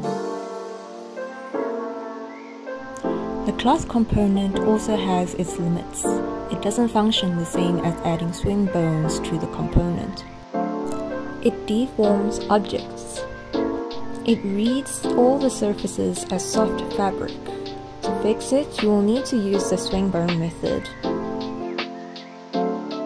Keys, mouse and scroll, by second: 0.0-0.9 typing, 0.9 click.